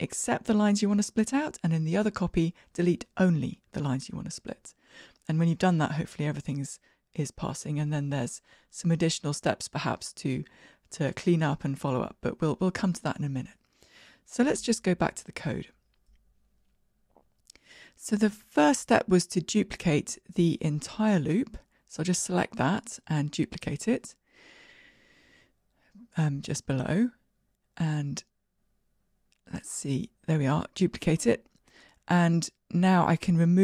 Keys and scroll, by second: 21.1 alt+Up, 21.1 ctrl+w, 23.4 alt+Up, 23.4 ctrl+w, 29.7 super+d.